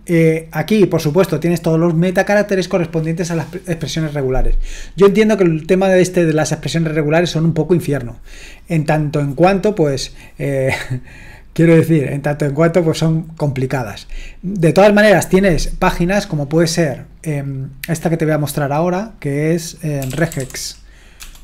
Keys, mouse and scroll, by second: 0.0-0.9 scroll down 1, 0.9-5.9 scroll down 1, 5.9-17.1 scroll down 1, 17.1-20.0 drag, 19.7-21.4 typing.